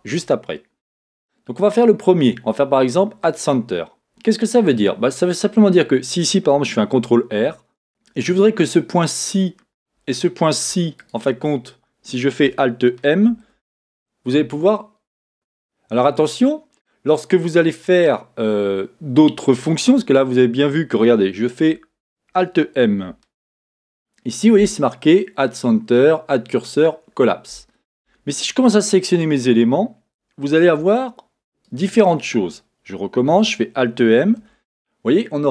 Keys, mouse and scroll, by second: 0.0-4.7 middle drag, 4.7 click, 6.7-9.3 middle drag, 6.9 ctrl+r, 7.9-9.2 scroll up 2, 9.3 click, 11.0 shift+click, 11.1-13.2 middle drag, 13.3 alt+m, 15.3 a, 16.2-21.1 middle drag, 23.4 alt+m, 28.1 Escape, 29.1 click, 31.6 shift+click, 33.4-35.5 middle drag, 34.2 alt+m.